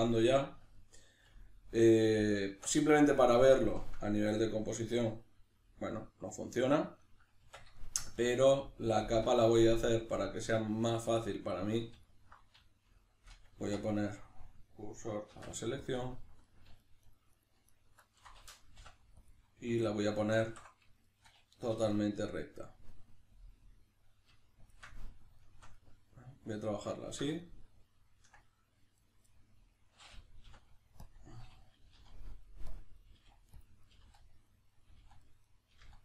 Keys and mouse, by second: 2.5 Tab, 7.5 Tab, 12.1 alt+right click, 13.6 1, 13.9 right click, 15.3 shift+s, 16.5 alt+right click, 16.8 alt+shift+right click, 17.1 alt+shift+right click, 17.3 alt+shift+right click, 17.7 alt+shift+right click, 18.1 alt+shift+right click, 18.8 ., 20.4 alt+q, 21.1-24.7 shift+middle drag, 21.7 r, 24.7 shift+click, 25.4-29.0 shift+middle drag, 29.0 right drag, 29.3-32.8 middle drag, 30.4 ., 31.8 g, 32.8 click, 33.0 right click, 33.1 g, 33.7 click, 33.9 right click, 33.9 g, 34.7 right click, 34.9 g, 35.5 right click, 35.7 g.